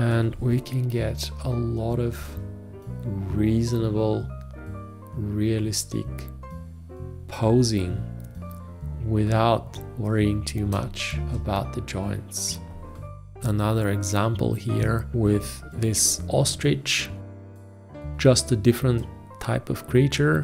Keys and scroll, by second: 10.8 space, 15.9 F2.